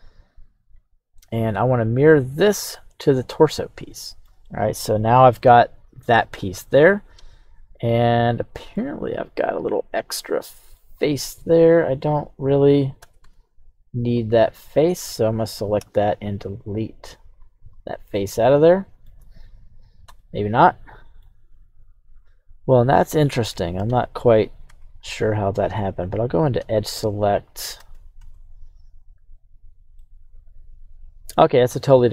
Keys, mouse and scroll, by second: 2.3 click, 3.9-4.3 shift+middle drag, 4.4-4.9 middle drag, 6.3 scroll down 1, 6.3-8.7 middle drag, 9.6-10.1 right drag, 10.1-10.8 middle drag, 10.9-12.7 scroll up 2, 13.2 Tab, 14.1 right click, 14.4 Tab, 14.9 right click, 15.8 x, 17.7 scroll down 1, 18.1 middle click, 19.4 ctrl+z, 20.2-21.2 middle drag, 22.7 middle click, 24.6 Tab, 26.2 right click, 26.6 alt+shift+right click, 28.1 Tab, 29.1 right click, 29.9-31.3 middle drag, 31.6 right click.